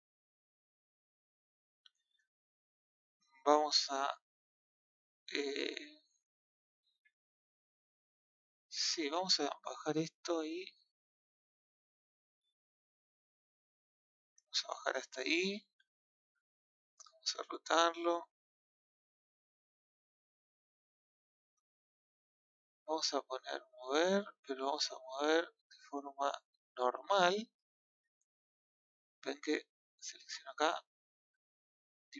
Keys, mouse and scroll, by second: 1.1-3.4 shift+middle drag, 3.4 click, 9.0 click, 11.0 shift+middle click, 11.6-11.9 scroll up 6, 12.2-13.3 shift+middle drag, 13.3 click, 15.0-16.5 scroll down 2, 16.5 click, 18.0 click, 23.7 click, 27.0 click, 29.7-30.7 middle drag, 30.7 click.